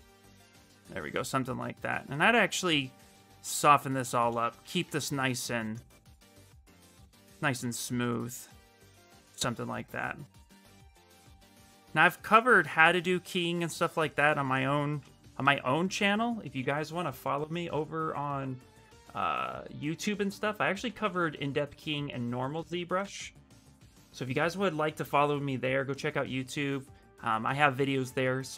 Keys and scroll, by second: 0.6 shift+f, 3.0-5.1 typing, 20.6 ctrl+c, 22.8 ctrl+v, 23.3 Return.